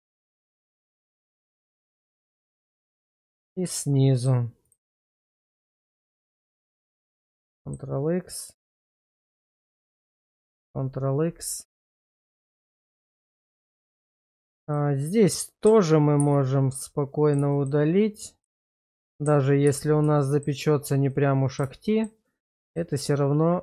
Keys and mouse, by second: 0.1 middle click, 1.0 shift+middle click, 3.3 shift+middle click, 3.8 middle click, 4.6 click, 6.6 ctrl+x, 7.2 middle click, 9.3 click, 10.3 ctrl+x, 12.5 shift+middle click, 16.3 ctrl+x, 16.7 middle click, 17.5 shift+middle click, 18.1 click, 19.7 ctrl+x, 20.2 shift+middle click, 21.1 middle click, 22.0 shift+middle click, 22.5 shift+middle click, 23.0-23.6 middle drag.